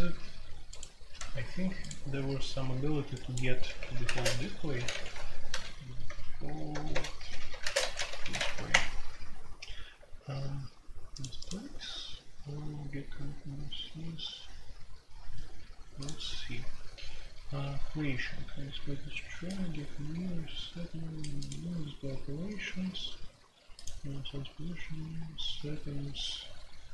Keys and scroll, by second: 3.6-8.4 typing, 8.7 Return.